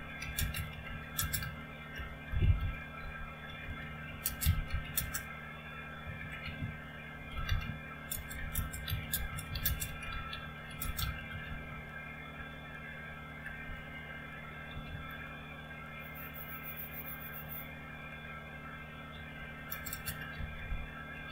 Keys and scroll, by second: 0.0-15.3 typing, 15.3 Return, 19.0-21.3 typing.